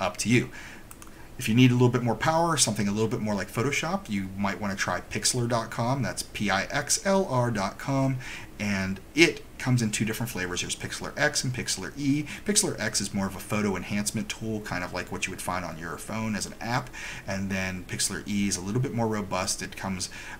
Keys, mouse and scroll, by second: 1.0 click.